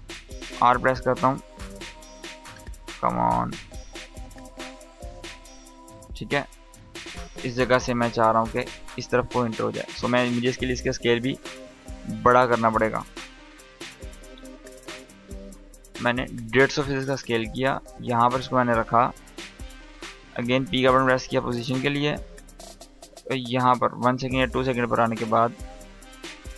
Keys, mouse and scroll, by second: 0.4 r, 1.8 click, 2.0 r, 2.9-5.1 drag, 9.6 s, 12.1 click, 12.8 Delete, 14.0 click, 17.0-17.9 drag, 19.9 p, 21.3-24.4 drag.